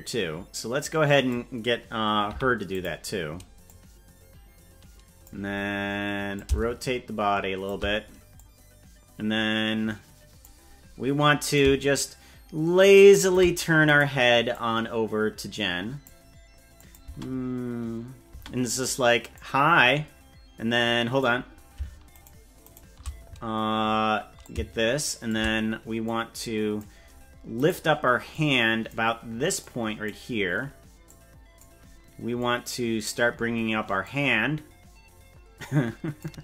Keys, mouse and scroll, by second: 2.3 i, 3.7-5.3 drag, 6.3-7.7 shift+drag, 8.4-10.5 drag, 11.5-13.4 shift+drag, 14.0 right click, 14.5-16.1 drag, 16.8 click, 17.2 space, 18.4 space, 19.4-21.2 drag, 22.4 shift+right click, 22.8 shift+right click, 24.4 click, 26.1 click, 27.8 right click, 28.3 click, 29.6 click, 31.1 click, 32.4 click, 34.0-36.2 drag.